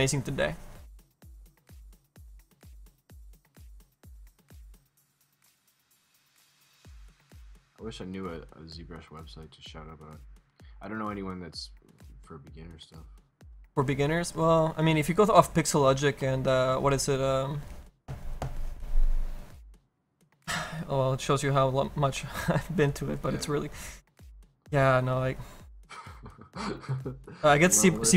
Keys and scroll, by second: 2.4 s, 16.2 s, 27.3 s.